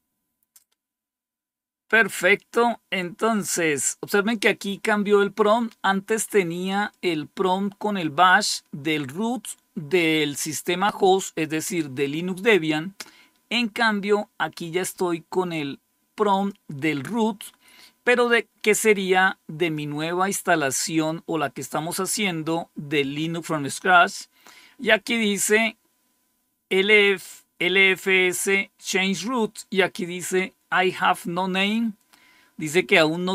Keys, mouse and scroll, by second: 6.7-23.1 drag, 32.8 click.